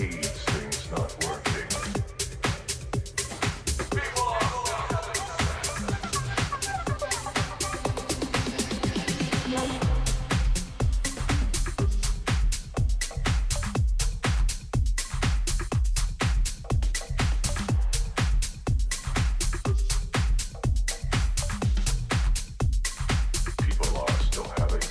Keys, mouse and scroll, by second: 1.0-2.9 middle drag, 1.7 z, 4.5 a, 5.1 a, 5.6 a, 8.1 a, 8.5 a, 10.6 b, 13.0 g, 15.6 a, 17.0 b, 18.9 g, 24.2 a.